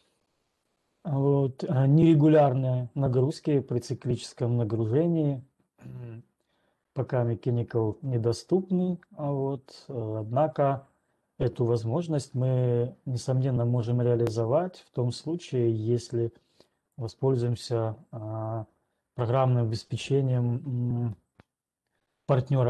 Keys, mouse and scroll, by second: 16.9 right click.